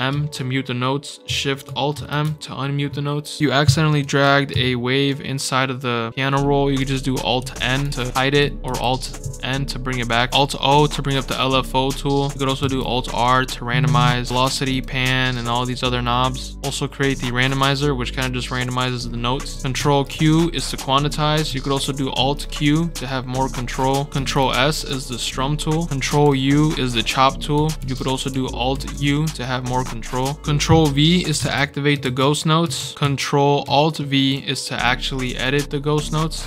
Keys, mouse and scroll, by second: 0.1 alt+m, 1.9 alt+shift+m, 3.8 right click, 7.3 alt+n, 8.6 alt+n, 11.3-12.3 drag, 12.5 alt+r, 12.9-13.6 scroll down 4, 13.4 click, 14.6 click, 15.3 click, 19.5 click, 19.7 ctrl+q, 22.1 alt+q, 23.0 click, 24.1 alt+s, 24.8 click, 26.0 ctrl+u, 27.7 ctrl+z, 28.7 alt+u, 29.3 click, 29.9 scroll down 1, 30.4 scroll down 2, 30.6-30.9 scroll up 2, 31.3 alt+v, 31.9 alt+v, 32.7 alt+v, 35.1-36.4 drag.